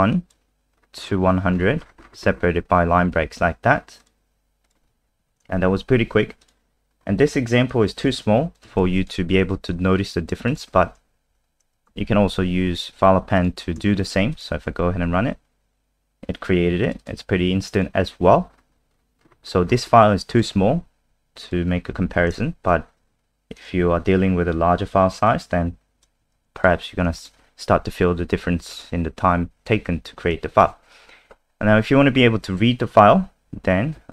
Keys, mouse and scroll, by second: 0.6-4.0 scroll down 21, 4.0 click, 5.2 End, 5.3 Home, 5.7 Delete, 6.4 click, 6.9-7.7 scroll down 2, 7.7 click, 8.7 ctrl+c, 9.0 click, 10.5 shift+click, 11.3 shift+Up, 13.0 click, 14.0 ctrl+s, 14.3 click, 14.8 ctrl+s, 14.8 F5, 14.8 click, 16.8 click, 17.0 click, 17.7 click, 18.4-20.7 scroll down 21, 20.3 click, 20.7 alt+F4, 21.4 click, 22.1 End, 22.2 Home, 22.7 Delete, 23.6 click, 24.1-25.3 scroll down 4, 25.3 click, 26.4 ctrl+c, 26.6 click, 27.2 shift+click, 27.7 shift+Right, 30.6 ctrl+v.